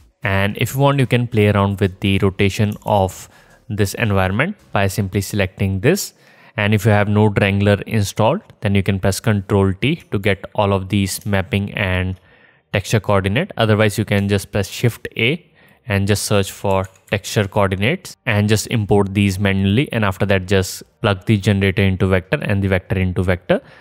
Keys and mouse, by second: 1.4-5.2 drag, 4.5 KP_0, 7.2 click, 12.0 ctrl+t, 15.2 click, 16.5 shift+a.